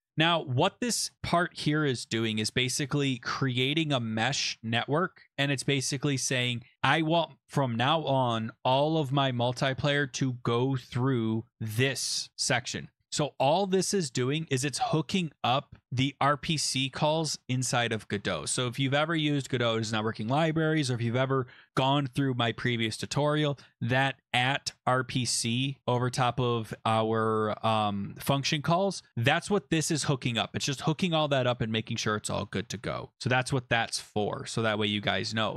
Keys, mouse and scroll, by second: 1.1-1.9 typing, 2.5 click, 11.5 click, 14.2 click, 35.1-35.5 scroll down 8.